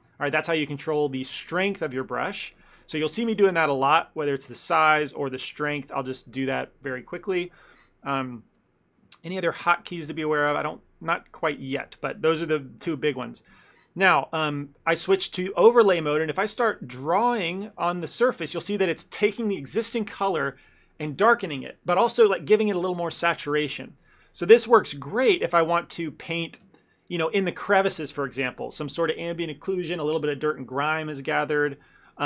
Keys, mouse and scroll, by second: 4.8 f, 6.6 ctrl+middle click, 7.3 ctrl+middle click, 8.2 shift+f, 9.2 ctrl+middle click, 9.4 middle click, 10.3 ctrl+middle click, 10.7 shift+middle click, 11.8 middle click, 12.0 shift+middle click, 16.2 click, 17.4 click, 17.9 click, 18.6 click, 24.7 ctrl+middle click, 25.5 ctrl+z, 25.9 ctrl+z, 26.2 ctrl+z, 26.8 ctrl+z.